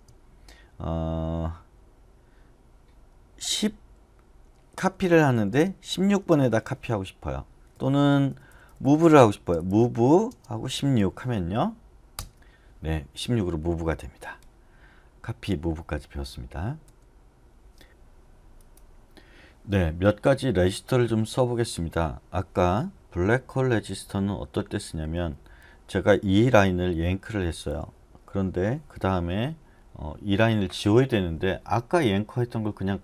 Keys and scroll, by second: 4.6-6.4 typing, 7.7-9.5 typing, 12.1 Return, 16.8 u, 24.1 j, 24.9 j, 25.4 j, 27.0 y, 27.2 y, 30.2 j, 30.5 j.